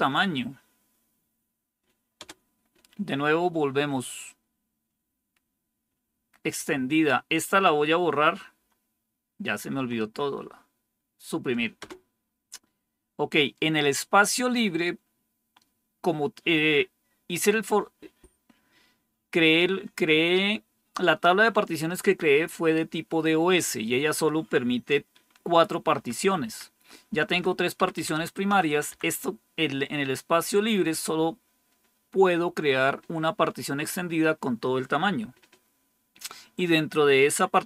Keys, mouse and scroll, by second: 2.1 Return, 6.1 Down, 6.4 Up, 8.5 Left, 9.6 Left, 11.7 Return, 25.8 Up, 26.1 Up, 26.3 Up, 27.0 Down, 27.2 Down, 27.7 Up, 27.9 Up, 28.1 Up, 28.4 Down, 28.6 Down, 28.8 Down.